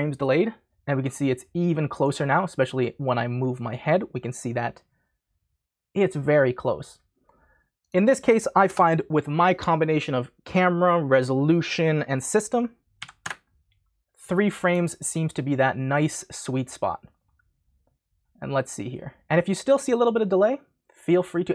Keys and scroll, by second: 8.7 BackSpace, 13.0 3, 13.2 Return.